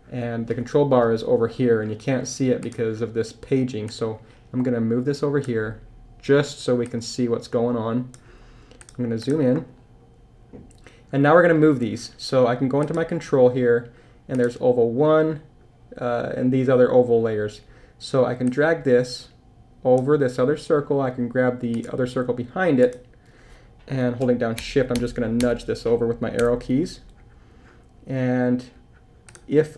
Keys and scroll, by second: 24.6 shift+Left.